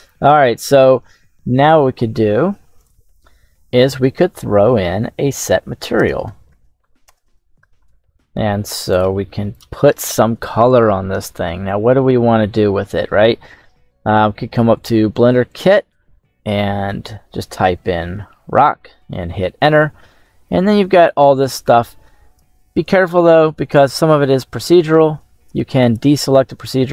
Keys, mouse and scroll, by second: 0.0-0.4 shift+middle drag, 0.0 scroll up 1, 0.5-1.6 scroll down 1, 1.6-2.0 scroll down 1, 4.2 middle click, 5.0-5.8 scroll up 1, 5.8 space, 14.6-18.6 drag, 25.7-26.9 drag.